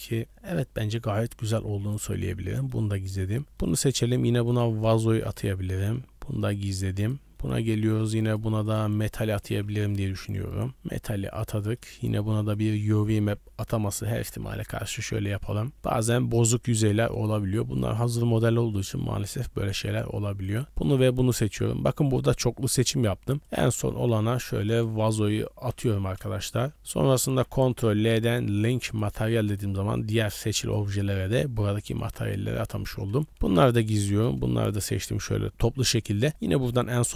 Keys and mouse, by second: 0.2 middle click, 1.5 h, 2.5 shift+middle drag, 3.2 click, 3.6 middle click, 4.6 click, 6.4 h, 7.0 click, 7.4 shift+middle click, 8.2 click, 8.6-10.7 drag, 11.6 middle click, 12.2 Tab, 12.4 middle click, 13.2 a, 14.4 u, 15.4 Tab, 16.8 middle drag, 17.4 shift+middle click, 18.0 middle drag, 18.7 shift+middle drag, 19.3 click, 20.5 shift+click, 23.4-26.7 drag, 26.9 middle click, 27.7 ctrl+l, 29.5 click, 30.0 click, 30.6 click, 32.0 b, 32.6 h, 33.9 b, 36.3-37.1 shift+drag.